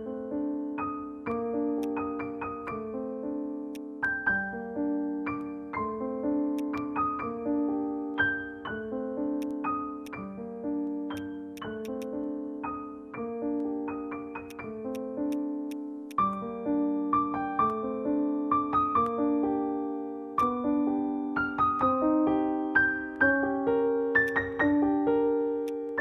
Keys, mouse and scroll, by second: 0.8-1.1 scroll up 1, 1.2 alt+middle click, 1.5-1.9 scroll down 1, 3.4 scroll up 1, 6.2 scroll up 1, 6.3 alt+middle click, 8.8-9.3 scroll up 1, 10.3 alt+click, 10.3 scroll down 1, 11.1 right click, 11.9 double click, 14.5 right click, 19.9 alt+scroll up 1, 20.0 alt+middle click, 23.3 scroll up 1, 23.6 alt+middle click, 25.6 alt+click.